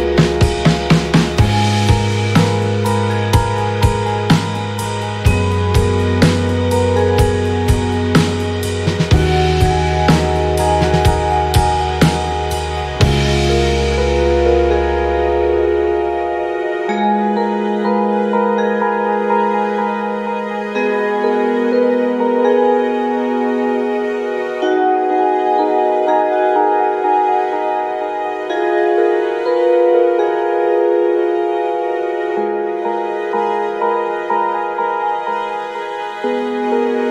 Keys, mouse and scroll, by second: 4.0 click, 5.2 click, 6.1 click, 7.7 click, 8.4 click, 10.1 click, 11.0 click, 13.0 click, 14.3 click, 16.1 click, 18.4-19.2 ctrl+scroll up 6, 19.6 ctrl+click, 20.3 click, 21.9 click, 22.7 click, 23.6 KP_8, 24.4 KP_5, 26.2 click, 27.2-27.5 ctrl+scroll up 2, 28.7 click, 30.3 click, 31.0 click, 32.4 click, 33.2 click, 33.8 click, 34.9 click.